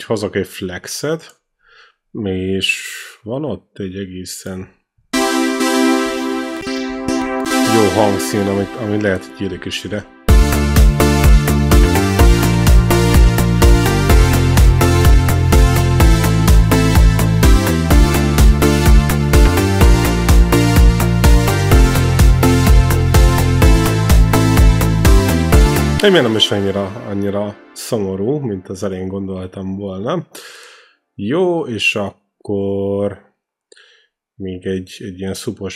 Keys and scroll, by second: 4.5-8.1 typing, 8.8 ctrl+c, 9.8 ctrl+v, 10.1 space, 24.6 space.